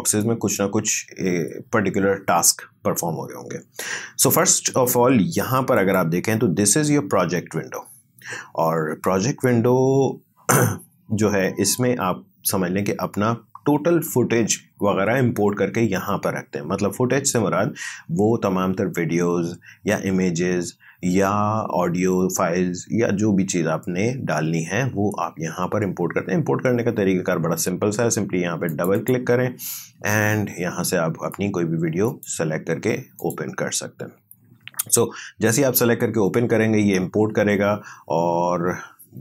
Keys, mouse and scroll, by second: 5.8 click, 7.1 click, 28.7 click, 32.1 click.